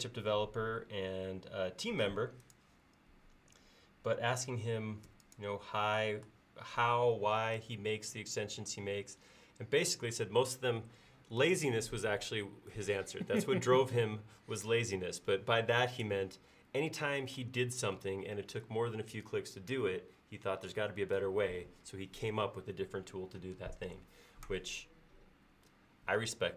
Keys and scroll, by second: 5.1 space.